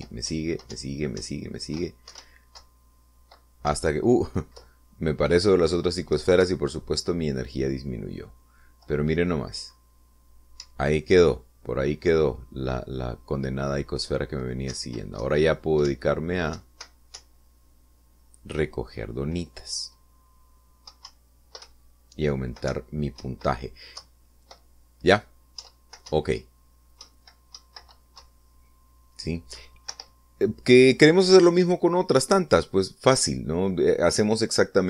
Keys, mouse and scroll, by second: 2.4 Right, 3.2 Left, 3.4 Up, 3.8 Left, 4.8 Right, 5.8 Left, 7.6 Left, 11.8 Up, 15.9 Right, 16.4 Left, 17.1 Up, 17.8 Right, 18.4 Up, 22.2 Up, 22.8 Right, 23.9 Up, 24.4 Right, 25.2 Left, 26.8 Right, 27.3 Up, 28.2 Right, 29.4 Down, 31.1 Escape, 33.5 middle click.